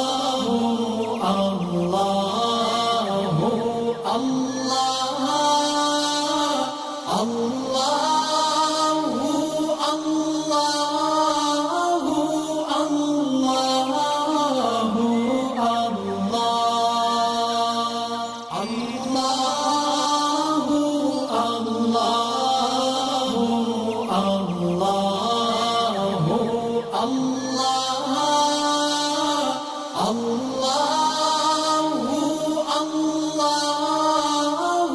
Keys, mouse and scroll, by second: 1.6 alt+scroll down 1, 1.9 click, 3.3 click, 3.7 ctrl+g, 3.8 ctrl+shift+], 4.9-7.0 drag, 7.9-8.6 alt+scroll up 3, 8.6-9.5 click, 10.0 alt+scroll down 1, 10.4 space, 10.5 click, 18.0-18.7 drag, 22.4 space, 22.5-25.9 drag, 30.7-31.4 shift+drag.